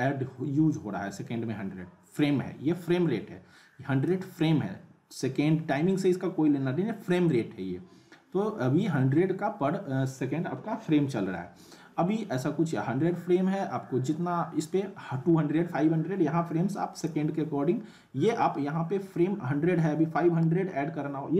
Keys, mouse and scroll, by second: 7.3-17.3 drag.